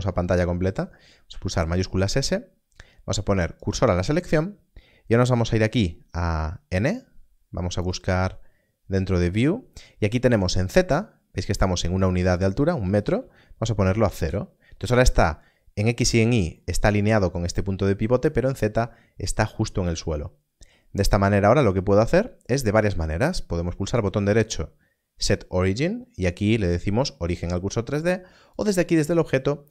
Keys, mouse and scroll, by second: 1.5 shift+s, 3.6 click, 5.1 n, 7.8 n, 12.3 click, 13.8 0, 14.1 Return, 23.8 right click, 28.5 click.